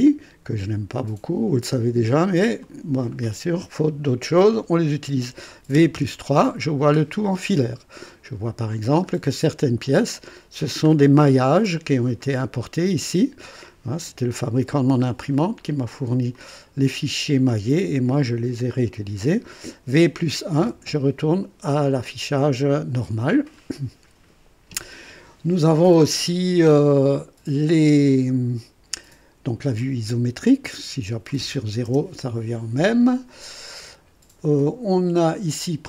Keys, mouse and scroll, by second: 2.6 click, 5.7-6.1 typing, 8.0-8.7 right drag, 8.8 scroll down 1, 9.4 right click, 10.8 scroll up 1, 12.2-13.2 right drag, 14.7 scroll down 1, 15.3-18.2 right drag, 16.3-18.2 drag, 20.5 v, 20.7 KP_1, 22.6 click, 23.4 scroll down 1, 29.7 click, 30.8-31.4 right drag, 31.9 KP_0.